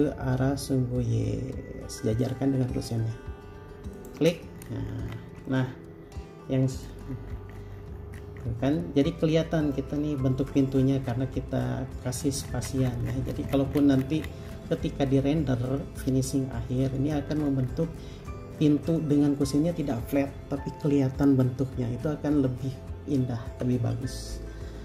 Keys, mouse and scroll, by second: 4.2 shift+click, 4.8-5.4 scroll down 1, 5.5 space, 5.7 middle click, 7.3-8.9 scroll up 1, 8.9 middle click, 10.7-11.8 scroll up 1, 11.8-14.6 scroll down 1, 15.4 middle click, 17.6 scroll down 1, 18.5 middle click, 19.0 scroll up 1.